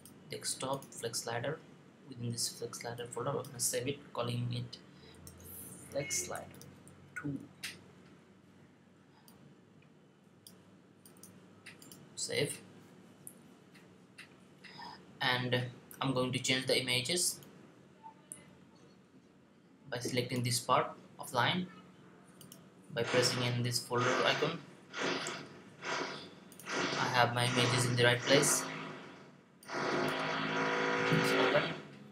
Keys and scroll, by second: 5.0-7.2 typing.